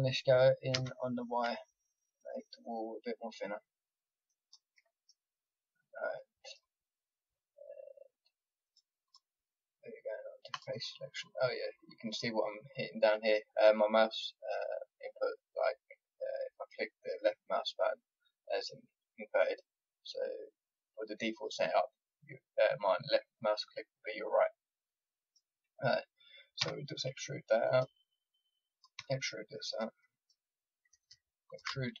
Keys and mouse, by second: 0.7 s, 5.3-8.6 middle drag, 8.6-12.4 drag, 25.0-27.7 middle drag, 26.6 e, 28.7 click, 28.9 e.